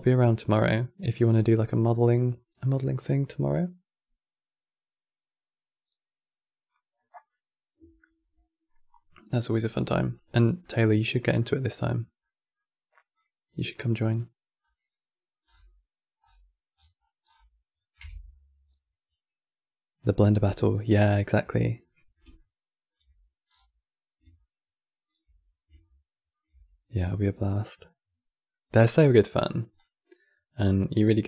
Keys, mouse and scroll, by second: 10.1-10.7 middle drag, 10.7-11.1 scroll down 4, 11.1-12.8 middle drag, 12.8 click, 13.6-14.8 scroll down 6, 15.3 scroll down 6, 15.9-17.1 scroll down 20, 17.7 KP_Decimal, 22.1-23.3 shift+middle drag, 23.3 scroll down 7, 24.1-25.2 shift+middle drag, 25.2-25.6 scroll up 1, 25.6-28.5 shift+middle drag, 28.5-28.9 scroll up 4, 29.0-29.4 middle drag, 29.4-31.2 drag.